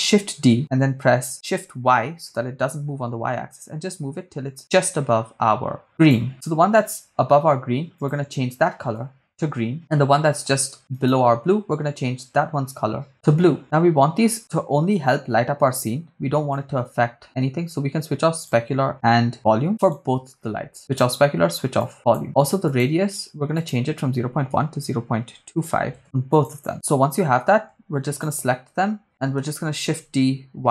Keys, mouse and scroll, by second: 0.2 shift+d, 2.1 shift+y, 6.1 click, 8.7 click, 11.1-13.1 right drag, 16.5 click, 17.7 click, 20.0-20.7 right drag, 20.8 click, 21.8 click, 22.7-26.0 drag, 26.0 right click, 26.3 click, 28.2-29.0 shift+right drag, 30.0 shift+d, 30.3 y.